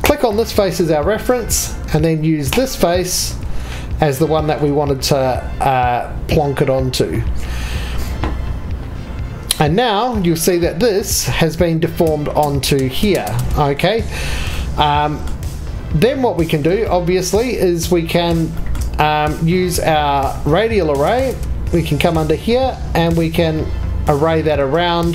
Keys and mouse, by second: 0.0 click.